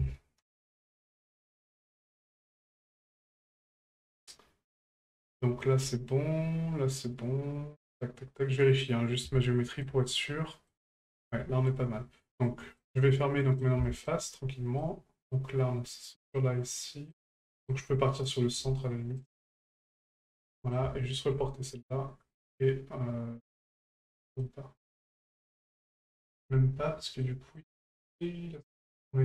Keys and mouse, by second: 3.2-3.5 middle drag, 3.8 shift+middle drag, 4.2-4.8 middle drag, 5.3 shift+middle drag, 6.1-9.2 middle drag, 9.4-9.8 shift+middle drag, 10.3-10.7 middle drag, 10.9-11.2 shift+middle drag, 12.6 middle drag, 13.4 middle click, 13.8 shift+middle drag, 14.8-15.3 middle drag, 16.3-17.1 middle drag, 17.5 shift+middle drag, 18.2 right click, 19.2 shift+right click, 20.5 middle click, 21.0 shift+middle drag, 23.7 middle click, 25.0 shift+middle drag, 26.4-27.1 middle drag, 27.2-27.6 middle drag, 28.2-28.6 middle drag, 28.8 middle drag.